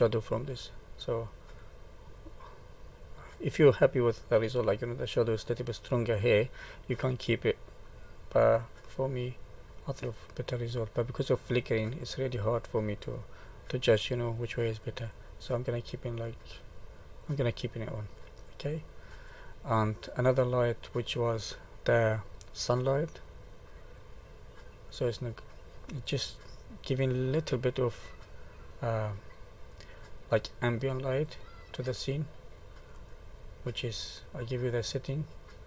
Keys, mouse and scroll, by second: 0.3 click, 1.6 middle click, 4.0 click, 8.0 click, 9.3 click, 10.0 middle click, 10.1 middle click, 11.4 middle click, 12.0-12.5 scroll up 2, 12.5 middle click, 14.8 click, 15.5 middle click, 17.2 click, 17.9 middle click, 19.0 middle click, 19.5-20.6 scroll down 4, 20.6 middle click, 24.0 click, 25.0 middle click, 28.3 click, 28.8 click, 29.5 click, 30.0 click, 30.9 click, 31.3 click, 32.3 middle click, 33.1-35.0 scroll down 9, 35.2 click.